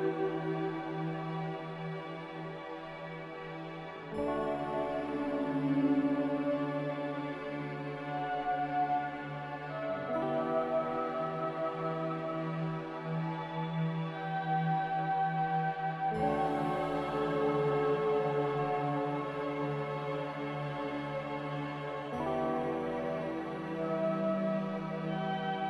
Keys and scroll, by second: 9.0 ctrl+z, 20.5 a, 23.9 z.